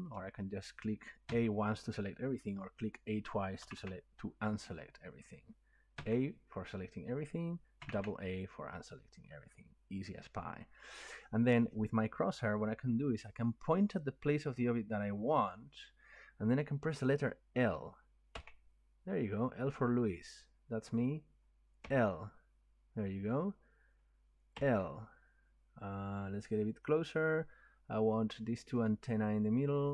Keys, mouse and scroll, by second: 0.0 click, 1.3 a, 3.0-4.9 drag, 3.6 a, 3.7 a, 6.0 a, 7.8 a, 7.9 a, 18.4-23.0 middle drag, 26.0 middle click, 27.5 middle click, 28.4 middle click, 28.6 middle click.